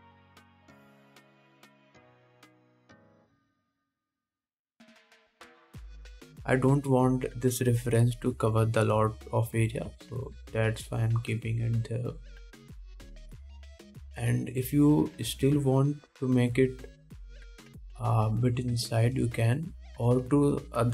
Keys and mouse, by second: 0.0-12.3 drag, 0.0-12.3 middle drag, 0.0-12.3 right drag, 13.0-14.9 middle drag, 14.9-18.7 drag, 16.7 Tab, 18.7 middle click, 18.7-20.9 drag, 20.0 g.